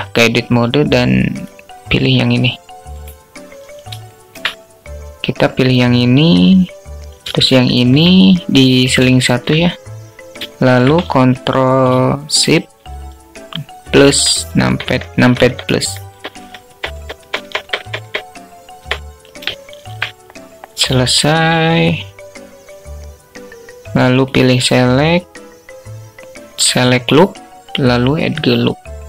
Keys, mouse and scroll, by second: 0.3 click, 3.4 alt+shift+click, 6.6 shift+click, 8.6 alt+shift+click, 9.8 shift+click, 23.6-27.7 drag.